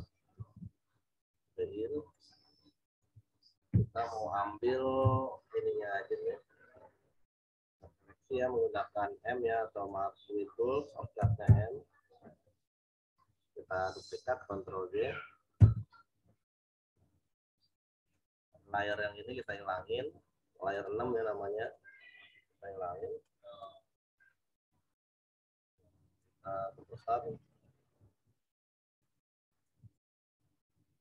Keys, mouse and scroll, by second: 0.3 ctrl+t, 2.1 alt+shift+click, 3.6 Return, 4.9 m, 6.1 click, 10.8 m, 13.2-13.7 typing, 15.5 ctrl+j, 16.1 v, 17.2 click, 18.9 right click, 19.4 click, 20.7 right click, 21.6 click, 24.9 right click, 25.4 click, 27.9 ctrl+t, 29.0 alt+shift+click.